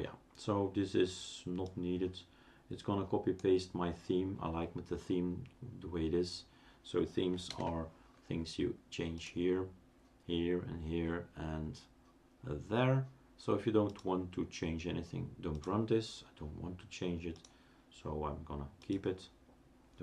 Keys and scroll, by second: 7.5 super+space.